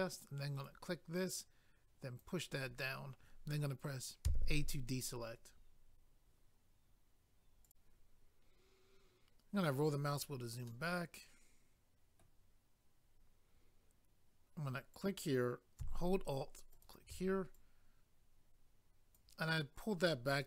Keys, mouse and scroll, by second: 0.6 click, 0.7 click, 1.3 click, 4.3 a, 7.7 click, 9.6-10.0 scroll down 1, 10.7 middle click, 14.9 click, 15.1 click, 16.7 alt+click, 16.8 alt+click, 17.5 click, 19.7-20.1 scroll down 2, 20.1 middle click.